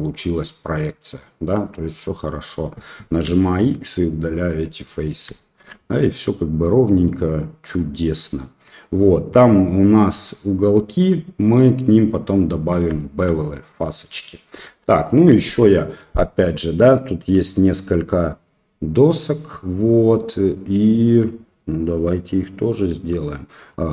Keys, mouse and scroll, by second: 3.4 x, 5.4 shift+middle click, 9.8 middle click, 13.0 shift+middle click, 13.4 middle click, 14.6 KP_1, 15.1 middle click.